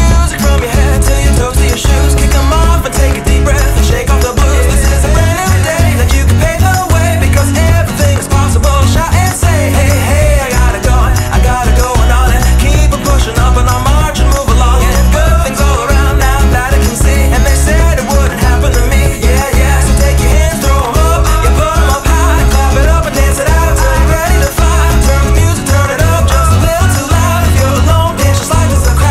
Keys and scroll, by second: 1.8 2, 5.7 alt+e, 6.4 alt+2, 7.4 alt+p, 14.5 alt+y, 20.6 alt+e, 20.9 alt+2, 24.5 alt+t.